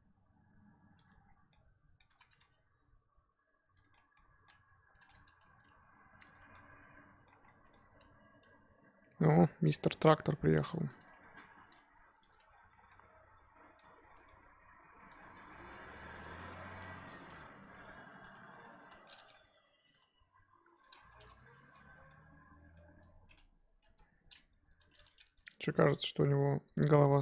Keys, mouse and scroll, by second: 1.1 Tab, 1.2 scroll down 1, 1.5-2.1 middle drag, 2.1 Tab, 2.4 g, 3.9-5.4 middle drag, 5.4 g, 6.4 Tab, 6.5-7.3 middle drag, 7.3 scroll up 1, 7.4 scroll down 4, 7.6 Tab, 7.7-9.5 middle drag, 9.5 scroll up 2, 9.7-11.0 middle drag, 11.0 click, 11.7 g, 12.4 Tab, 12.5-12.9 scroll down 7, 12.9-14.0 middle drag, 14.0 scroll down 3, 14.2-15.2 middle drag, 15.2-16.2 scroll up 6, 15.3 Tab, 15.6 z, 16.3 z, 16.5 scroll up 1, 16.7 3, 17.3 click, 18.2 ctrl+KP_Add, 18.9 z, 19.0-19.4 middle drag, 19.4-19.8 scroll down 1, 19.8 g, 21.0 Tab, 21.1 scroll down 1, 21.3-21.9 middle drag, 21.9 scroll down 1, 22.1-23.2 middle drag, 23.2-23.9 scroll up 1, 23.9 KP_1, 23.9-24.6 scroll up 2, 25.3 Tab, 25.7 g, 27.0-27.2 scroll down 2.